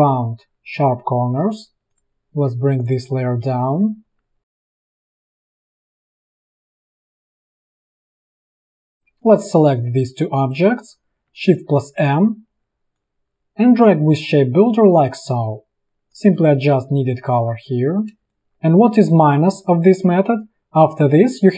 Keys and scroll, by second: 1.9 ctrl+[, 3.5 a, 4.2 v, 8.0 ctrl+[, 9.7 space, 12.0 shift+m, 15.5 v, 15.9 space, 17.6 v, 18.3 space, 18.5 a.